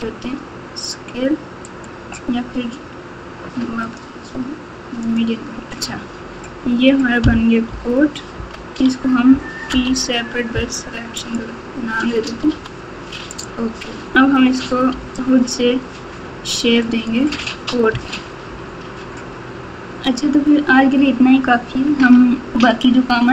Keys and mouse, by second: 3.8-5.2 drag, 7.6 KP_Divide, 8.3 KP_Divide, 9.7 p, 12.4 Tab, 13.3 click, 14.9 g, 17.9 Tab, 18.4 Tab.